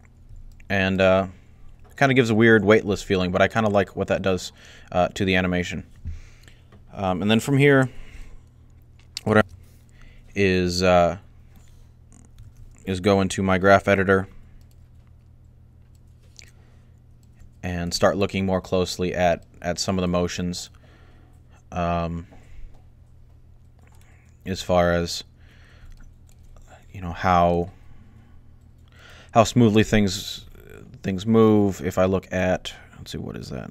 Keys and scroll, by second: 12.2 alt+a.